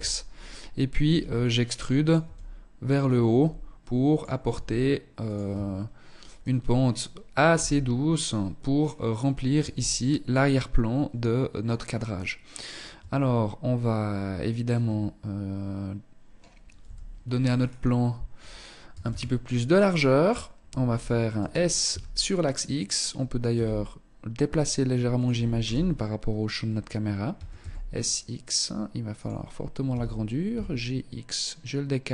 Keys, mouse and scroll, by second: 0.2 e, 1.2 click, 1.4 e, 2.0 click, 2.4 e, 3.6 e, 4.7 Tab, 6.6 KP_0, 7.9 scroll down 2, 8.7 z, 12.1 Tab, 16.0 KP_7, 16.7-18.0 scroll down 5, 18.0 a, 18.2 a, 20.5 s, 22.6 g, 24.4 click, 24.7 KP_0, 26.4 s, 29.0 g.